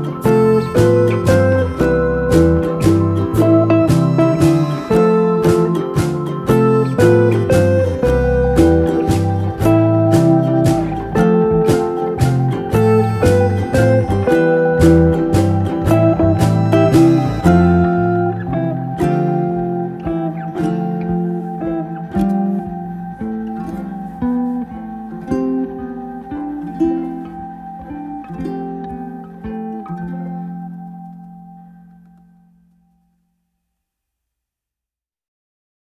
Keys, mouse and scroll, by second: 17.8-18.8 scroll up 1, 19.7 ctrl+scroll up 1, 20.2 scroll up 1, 21.4 scroll down 1, 29.4 scroll down 1, 33.5 scroll down 1.